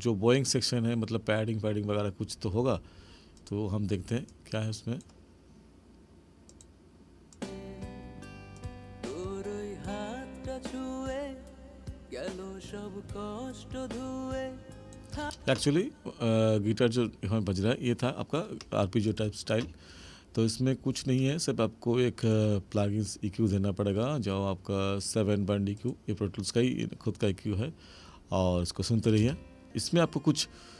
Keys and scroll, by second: 15.2 space, 29.2 space.